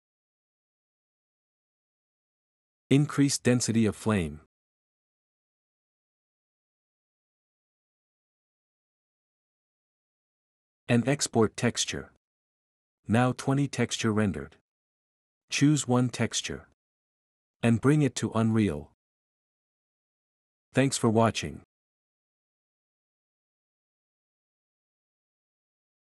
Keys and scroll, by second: 19.9 typing.